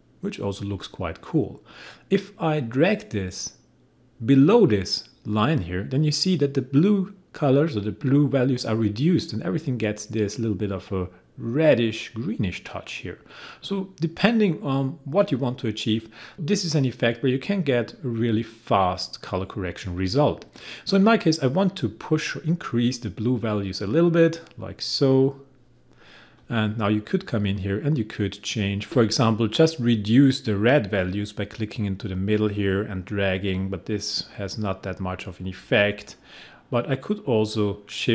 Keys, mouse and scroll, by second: 26.4 click, 28.9 ctrl+z, 32.2-38.1 drag.